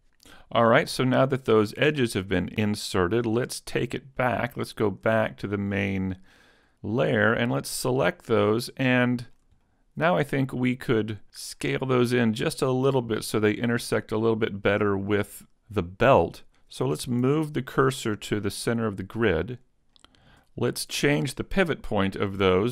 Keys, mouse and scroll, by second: 0.4 click, 0.7 shift+middle click, 1.6 scroll up 1, 1.7 middle click, 4.7 shift+click, 5.3-5.7 scroll down 3, 5.7 middle click, 7.5 right click, 8.0 middle click, 8.7-9.1 scroll up 2, 9.1 shift+middle click, 9.7 middle click, 11.4 middle click, 14.1-14.5 scroll down 1, 14.7 middle click, 17.3 shift+s, 19.1 scroll down 6, 20.0 shift+middle click.